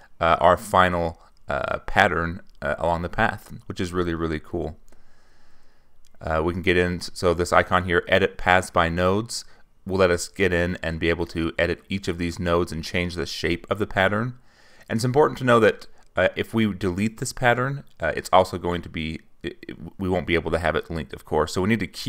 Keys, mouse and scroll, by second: 0.6-3.0 drag, 5.5 click, 7.5 click, 9.5 click, 10.7 click, 12.1 middle click, 12.3 click, 14.4 click, 15.7-19.2 drag.